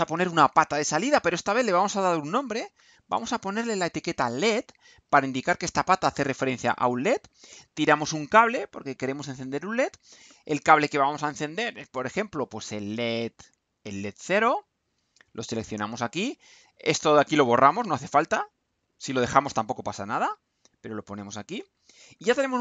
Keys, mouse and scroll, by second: 0.8 click, 2.4-3.4 typing, 3.6 Return, 6.9 click, 8.6-10.1 drag, 12.6 click, 15.2 click, 16.9 click, 21.6 Delete.